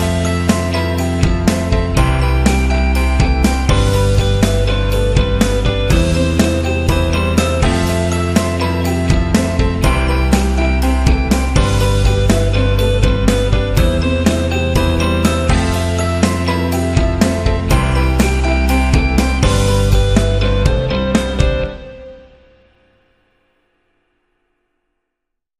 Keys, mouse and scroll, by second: 3.4 click, 7.9 space, 8.8-10.5 drag, 10.5 click, 12.3 click, 15.3 click, 17.1 click, 18.6 click, 22.1 click, 23.2 click, 23.4 click.